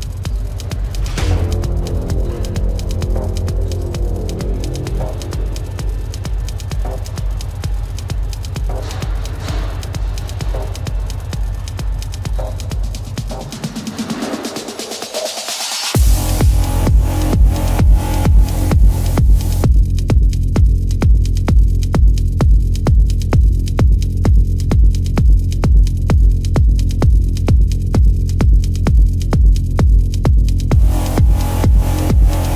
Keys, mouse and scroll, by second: 1.8 space, 3.1 ctrl+alt+z, 3.4 ctrl+alt+z, 8.6 ctrl+-, 11.6 ctrl+-, 16.1 ctrl+-, 16.3 ctrl+alt+z, 21.4 ctrl+=, 21.5 ctrl+alt+z, 22.6 space, 26.1 ctrl+alt+z, 27.3 space, 29.7 ctrl+alt+z, 30.3 ctrl+alt+z.